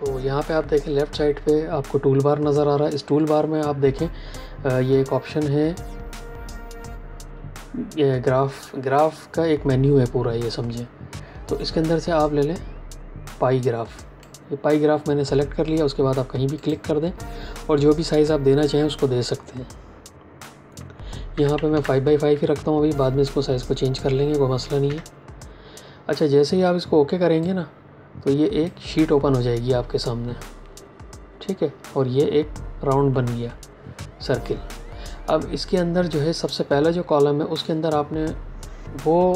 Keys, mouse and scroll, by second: 6.8 click, 21.2 KP_5, 21.4 Tab, 21.6 KP_5, 24.8 KP_Enter, 27.3 click.